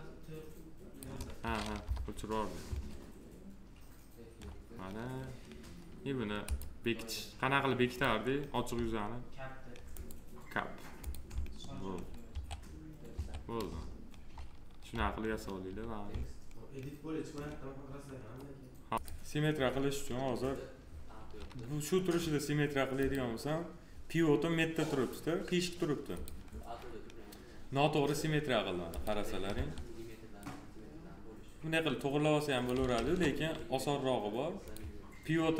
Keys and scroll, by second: 1.7 p, 12.2 2, 13.6 alt+space, 29.4 1, 32.8 ctrl+z.